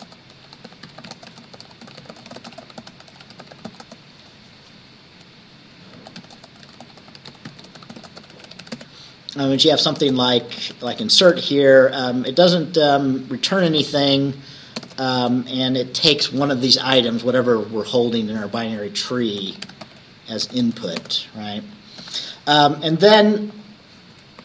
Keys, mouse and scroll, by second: 0.0-4.3 typing, 5.8-12.4 typing, 13.9 shift+9, 14.9 shift+t, 15.2 shift+space, 19.3-21.3 typing, 22.1 ctrl+s, 23.6 click.